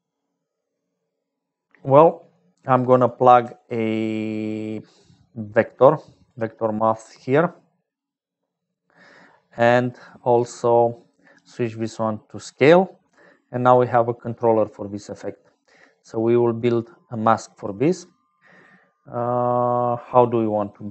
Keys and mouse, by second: 0.0-20.9 typing, 2.5 click, 3.0 click, 10.0 click, 11.4-12.6 drag, 13.5-14.9 drag, 16.1-17.1 drag, 17.6 click, 18.2 click.